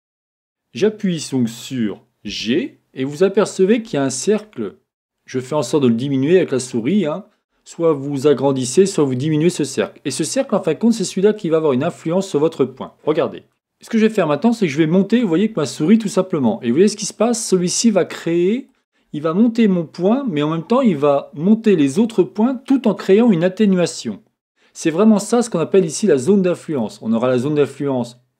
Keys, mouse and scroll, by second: 2.4 g, 26.6-28.3 drag.